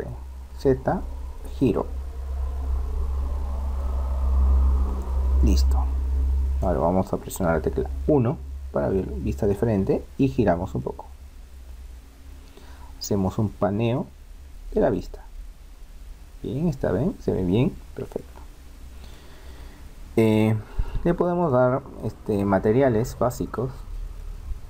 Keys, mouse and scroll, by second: 8.2 KP_1, 10.8-12.7 middle drag, 14.3-16.8 middle drag, 18.6-20.8 middle drag, 21.4-23.0 right drag, 23.0-24.6 middle drag.